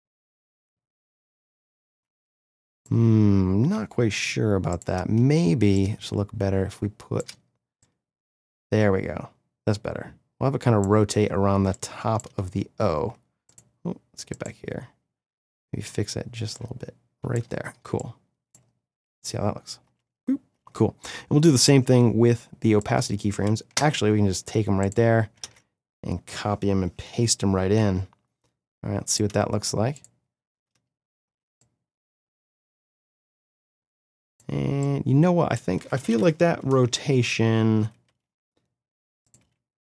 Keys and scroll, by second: 19.8 space, 23.7 ctrl+c, 25.4 ctrl+v, 27.7 n, 28.6 v, 30.5 space, 38.1 r.